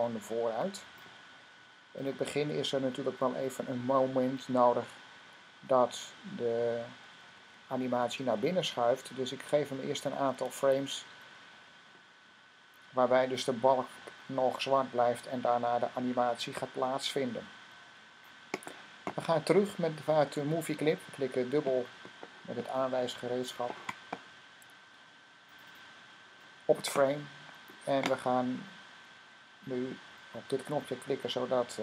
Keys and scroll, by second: 6.4 F5, 6.9 F5, 7.1 F5, 7.3 F5, 7.4 F5, 7.6-9.9 typing, 10.5 F5, 13.2 typing.